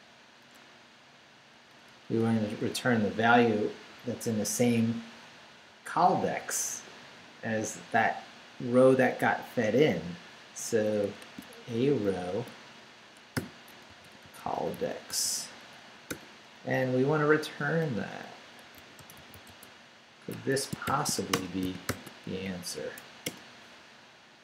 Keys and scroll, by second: 0.5 BackSpace, 11.2-16.1 typing, 16.7 Left, 18.1 Left, 18.4-21.9 typing, 20.3 Escape, 21.3 Return, 22.4 shift+Up, 23.2 Return.